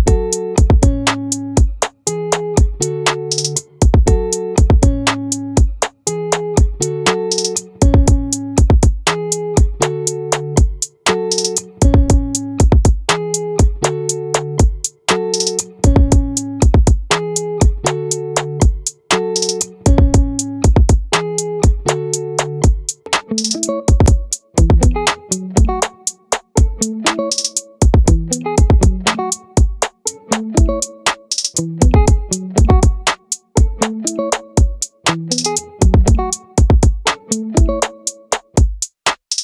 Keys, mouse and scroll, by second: 5.8 middle click, 11.0 middle click, 13.6-16.6 right drag, 17.6-20.6 right drag, 21.0 right click, 21.8 click, 22.6 ctrl+z, 23.3 ctrl+z, 24.1-25.9 right drag, 33.6-36.3 middle drag.